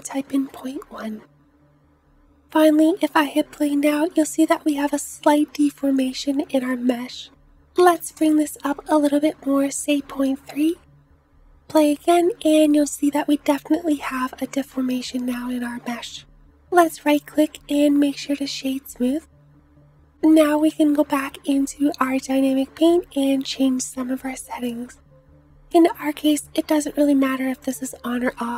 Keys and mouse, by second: 3.2 space, 5.0 space, 11.8 space, 14.1 space, 25.9 click, 26.5-28.5 drag.